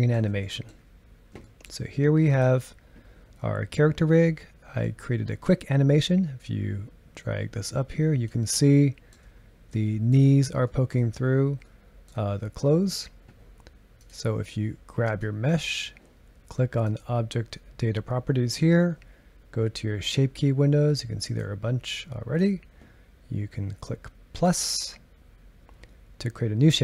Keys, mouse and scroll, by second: 2.3 click, 6.4-8.7 drag, 8.7-10.3 shift+middle drag, 10.3-10.7 scroll up 2, 10.7-11.1 shift+middle drag, 11.1-11.6 scroll up 1, 11.6-14.0 middle drag, 14.0 click, 15.0 click, 16.8 click, 21.4-26.8 drag.